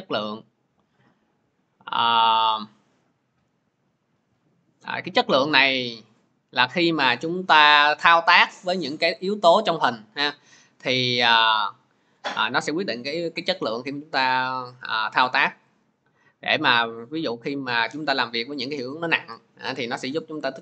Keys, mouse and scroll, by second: 7.1-15.8 drag, 20.3 click.